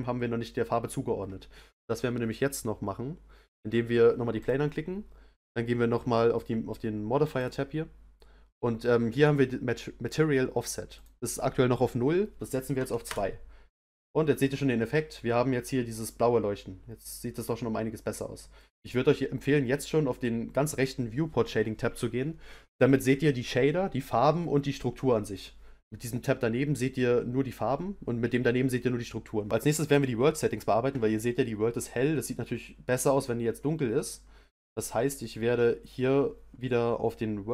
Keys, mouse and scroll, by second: 4.4 click, 13.2-16.1 drag, 16.1-24.6 middle drag.